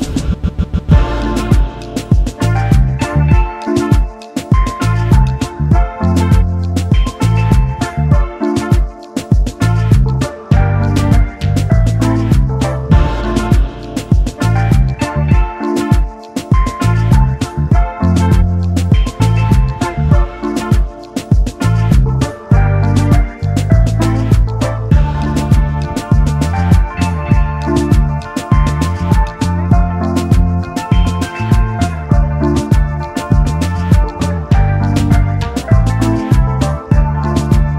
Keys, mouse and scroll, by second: 0.1 ctrl+z, 1.6 shift+click, 3.3 ctrl+g, 5.3 right click, 11.7 shift+click, 16.8-17.2 alt+scroll down 1, 17.6-18.0 alt+scroll up 1, 18.2 space, 22.3 alt+scroll down 1, 23.2-23.5 alt+scroll up 1, 27.5 Delete, 28.7 double click, 29.8 ctrl+g, 32.7 alt+scroll down 1, 35.1 alt+scroll down 1, 35.2 space, 37.0 alt+scroll up 1, 37.3 space.